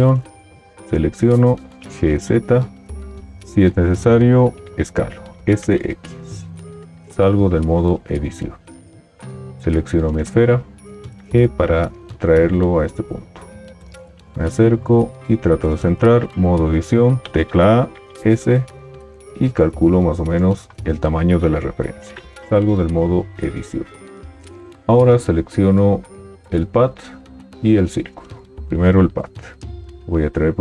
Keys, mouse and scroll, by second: 2.0 g, 5.5 s, 7.2 Tab, 11.1 g, 16.4 Tab, 18.3 s, 22.5 Tab, 30.2 g.